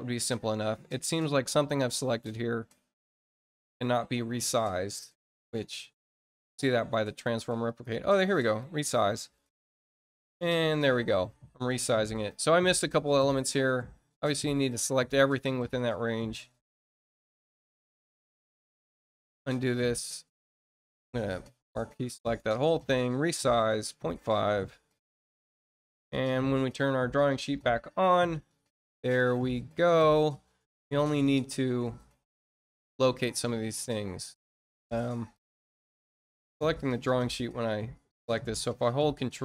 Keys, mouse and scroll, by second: 0.4 scroll up 2, 1.0-1.4 scroll down 2, 2.2 scroll down 2, 2.9-3.3 scroll up 2, 4.3 scroll down 2, 5.7 click, 7.6 click, 8.5 click, 12.3-13.0 scroll up 4, 13.2-13.8 scroll down 4, 14.1 middle click, 19.3 click, 22.2 click, 23.8 click, 27.4 click, 28.1-28.5 scroll up 1, 28.8 middle click, 29.7 scroll up 1, 31.8 click, 33.3 middle click, 34.5 click, 35.6-36.3 scroll up 4, 39.2 ctrl+click.